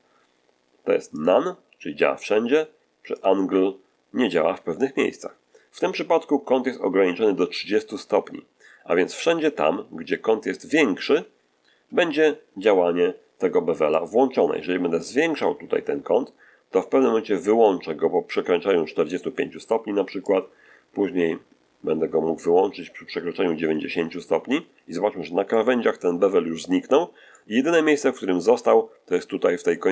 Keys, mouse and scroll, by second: 1.1 click, 3.1 click, 13.9-17.7 drag, 20.2-24.6 drag, 25.1 scroll down 1, 25.4-26.1 middle drag, 27.2-28.5 middle drag.